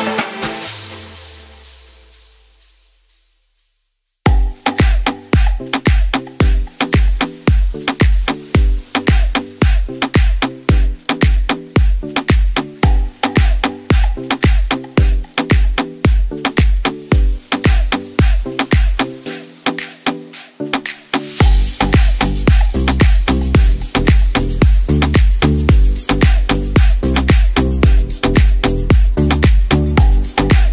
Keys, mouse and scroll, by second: 2.0 y, 2.7 g, 2.9 x, 4.2 g, 4.2 z, 5.6 x, 6.4 g, 6.6 x, 8.5 s, 13.2 ctrl+z, 13.3 ctrl+z, 15.0 s, 19.0 e, 19.3 x, 23.1 shift+a, 24.3-28.0 typing.